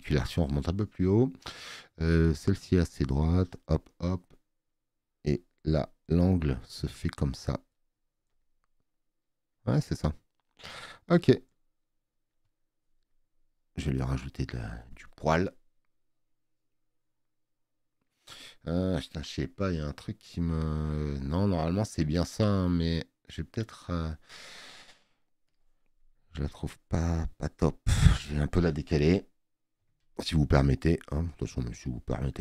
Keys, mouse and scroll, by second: 29.8 ctrl+t, 30.6 click.